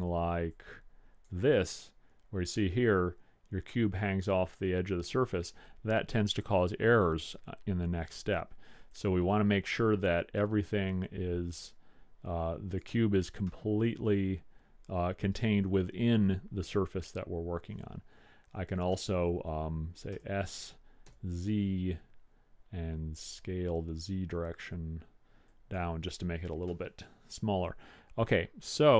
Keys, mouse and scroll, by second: 0.6-1.8 drag, 1.8-4.7 middle drag, 7.0-9.0 middle drag, 9.0 click, 13.6-15.5 middle drag, 20.2 s, 26.8-28.7 middle drag.